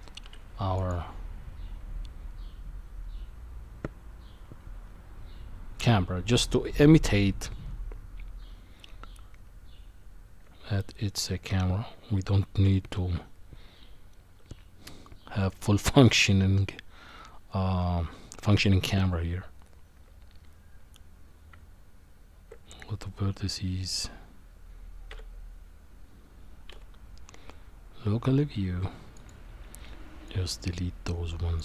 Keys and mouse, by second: 0.2 q, 10.4 Tab, 12.1 Tab, 21.5 Tab, 25.1 KP_Divide, 26.7 KP_1, 30.2-31.6 drag.